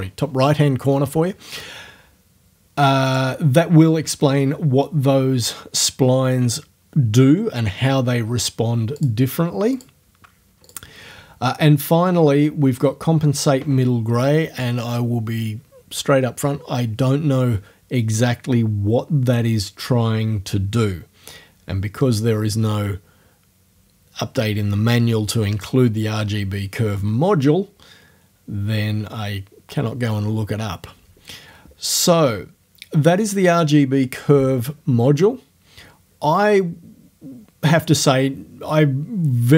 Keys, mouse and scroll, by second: 3.1 click, 9.0 click, 9.8 click, 10.7 click.